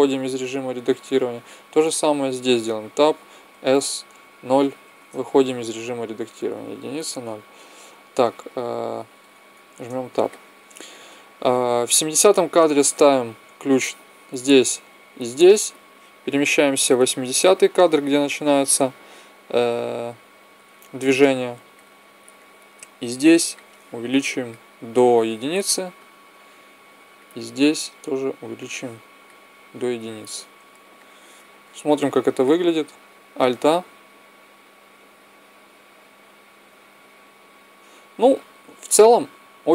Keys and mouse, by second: 1.2-2.5 right drag, 2.3 Tab, 3.2 s, 6.2 KP_1, 6.8 KP_0, 9.0 Tab, 13.0 i, 13.9-15.7 drag, 14.8 i, 16.0-17.9 drag, 23.2-25.0 drag, 25.3 i, 27.2-28.7 right drag, 28.2 click, 28.9 click, 28.9 right click, 29.2 click, 29.4 i, 30.7 click, 33.0 alt+a, 38.9 Escape.